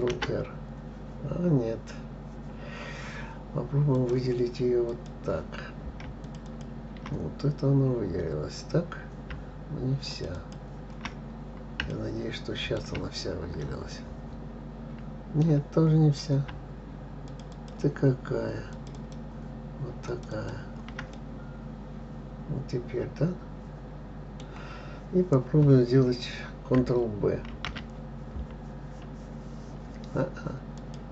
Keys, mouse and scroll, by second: 0.4 ctrl+r, 5.3 click, 6.6 shift+click, 6.9 shift+click, 8.4-8.9 scroll down 2, 8.9-10.0 scroll up 1, 10.5 shift+click, 10.8 shift+click, 11.7-12.3 scroll down 2, 12.3-16.2 shift+middle drag, 16.2-17.7 scroll up 3, 17.7 shift+click, 17.9 shift+click, 19.1 shift+click, 19.4 shift+click, 20.5 shift+click, 20.7 shift+click, 21.5-24.6 middle drag, 27.9 ctrl+b.